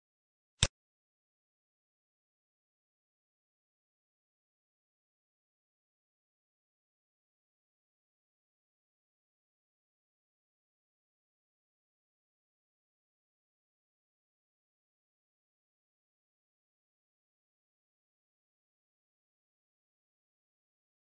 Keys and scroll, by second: 1.6 F4, 4.9 F9.